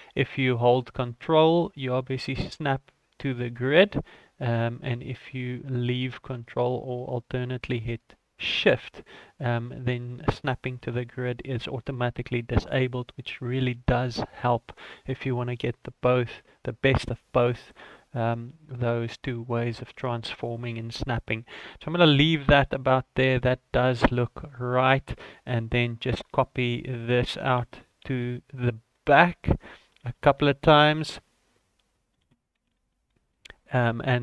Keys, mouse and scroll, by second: 23.8 shift+middle click, 24.3-25.0 scroll up 4, 25.0 right click, 25.3 click, 26.8 shift+middle click, 27.6 shift+d, 30.0 shift+g, 32.2 shift+d.